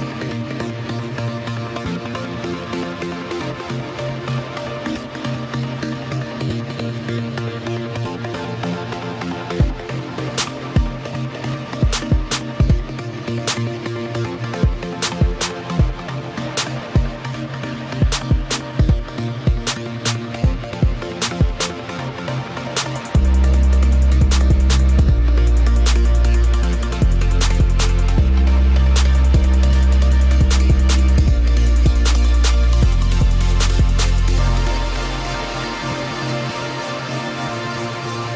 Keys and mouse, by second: 22.5 click, 22.7 click, 25.0-26.2 drag, 28.0 click, 29.2 KP_5, 29.5 KP_Decimal, 29.7 KP_6, 30.0 Return, 33.1 click, 34.3 KP_6, 34.6 Return.